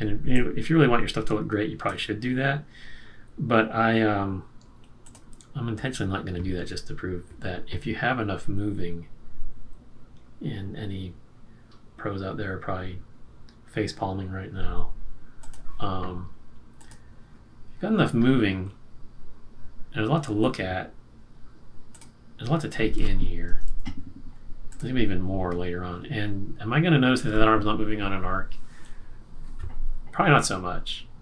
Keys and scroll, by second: 23.6 super+-.